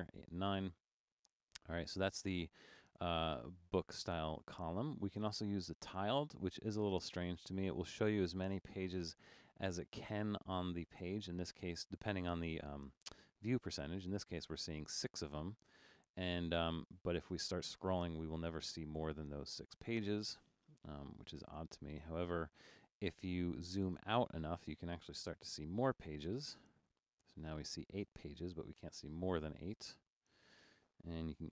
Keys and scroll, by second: 25.7 super+-, 26.5 super+-.